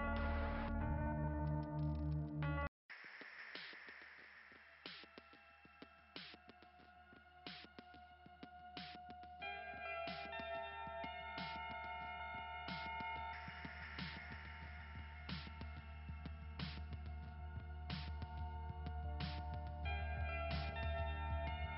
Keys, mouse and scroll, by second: 0.2 scroll up 1, 1.5-1.9 scroll up 3, 4.3-4.8 scroll down 2, 7.3 click, 8.2 click, 8.8 click, 11.6 click, 14.4 click, 15.1 click, 15.5 click, 15.9 click, 16.2 click, 16.5 click, 19.7 click, 20.4 click, 20.7 click, 20.9 click, 21.2 click, 21.6 click.